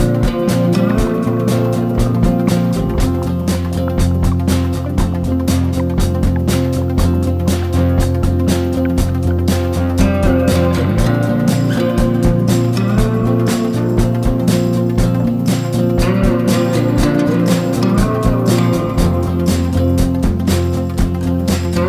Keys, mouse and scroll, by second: 17.5 ctrl+scroll, 18.6-21.8 drag.